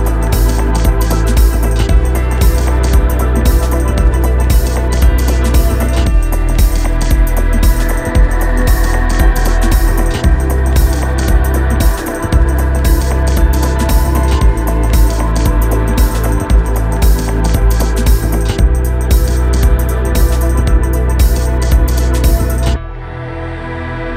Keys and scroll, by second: 0.9 alt+shift+super+Delete, 6.2 super+Return, 7.0 Return, 9.8 shift+Up.